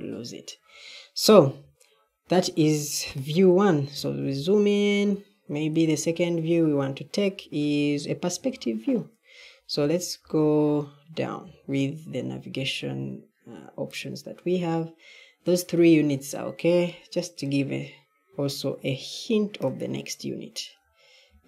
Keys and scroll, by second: 3.8-11.9 typing, 20.6 d.